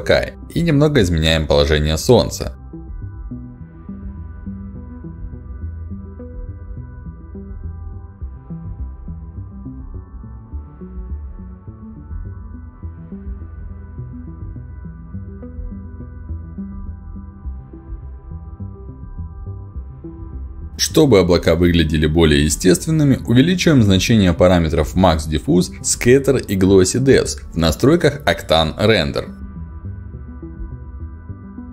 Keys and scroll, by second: 7.1 BackSpace, 7.2 0, 7.3 5, 7.5 Return, 10.3 BackSpace, 10.4 3, 10.6 Return, 25.7 1, 26.0 6, 26.5 Return.